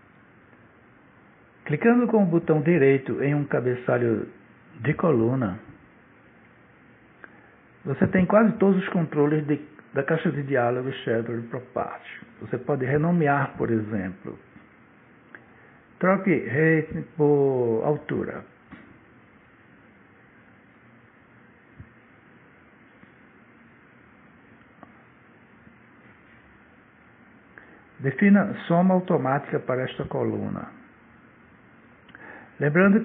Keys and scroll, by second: 21.8-22.9 typing, 26.6 Return.